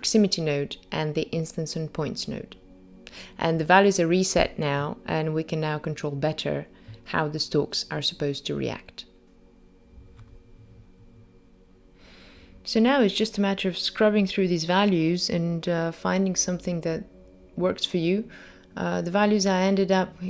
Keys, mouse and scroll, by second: 8.4 click, 9.0 click, 9.6 click, 11.0 click, 11.8 click, 12.5 middle click, 12.7 scroll down 2, 12.8 click, 13.0 g, 14.1 click, 14.3 click, 15.7 click, 15.8 KP_0, 16.2 click, 16.8 click, 17.3 click, 17.4 g, 18.7 middle click, 19.1 g, 20.0 middle click, 20.2 scroll up 3.